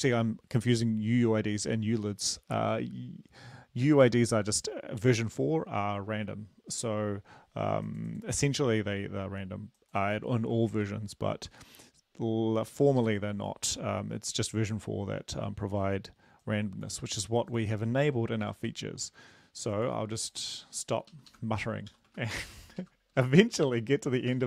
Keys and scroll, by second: 13.0 Left, 18.5 ctrl+c, 21.0 Left, 21.2 Left, 21.3 Left, 21.6 Right, 21.9 ., 22.1 space, 22.4 ctrl+v, 22.8 ctrl+Left, 23.2 ctrl+Left, 23.7 ctrl+Right, 24.3 BackSpace.